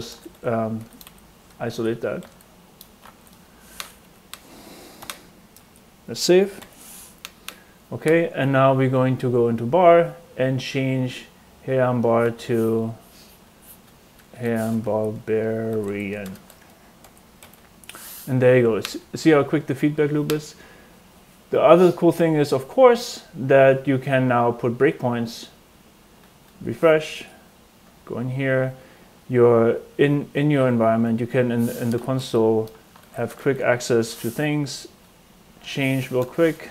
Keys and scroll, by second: 0.0-3.0 typing, 4.0 Right, 4.9-5.6 typing, 5.5 super+s, 6.5 super+r, 14.3 Right, 14.8-16.7 typing, 17.0 super+s, 17.4 super+r, 31.6-33.5 typing, 36.1 BackSpace.